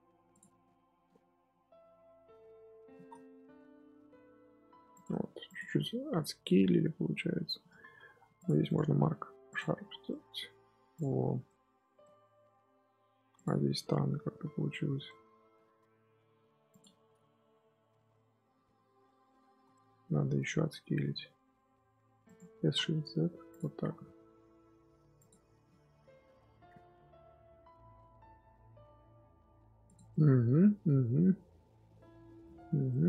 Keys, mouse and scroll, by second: 0.2 alt+click, 0.5 scroll down 1, 0.5 middle click, 1.5-2.7 scroll up 1, 2.7 s, 5.0 Tab, 5.4 click, 5.6 scroll down 3, 5.8-7.5 middle drag, 7.5 scroll up 4, 7.6 Tab, 7.9 2, 8.3 alt+click, 8.6-9.6 right drag, 9.6 Tab, 9.8 scroll down 4, 10.0-10.9 middle drag, 10.9 click, 11.1 scroll down 1, 11.4-11.7 middle drag, 11.7 scroll up 1, 11.9-12.9 middle drag, 12.9-13.3 scroll up 2, 13.3 click, 13.5 Tab, 13.7-15.6 middle drag, 15.6 3, 16.6 alt+click, 17.0-17.3 scroll down 1, 17.3 KP_7, 17.8 scroll up 1, 18.1 z, 18.4-19.3 scroll up 4, 19.5 z, 19.6-21.0 middle drag, 21.0 s, 22.4 s, 23.5 Tab, 23.8 scroll down 1, 23.8 scroll up 1, 23.9-25.1 middle drag, 25.1 click, 25.3 scroll up 1, 25.4 scroll down 2, 25.6-27.4 middle drag, 27.4-29.4 scroll down 1, 29.4-29.8 scroll down 1, 29.8 click, 30.0-31.3 middle drag, 31.3-31.8 scroll down 1, 31.8-32.6 middle drag, 32.6 Tab, 32.8 middle click.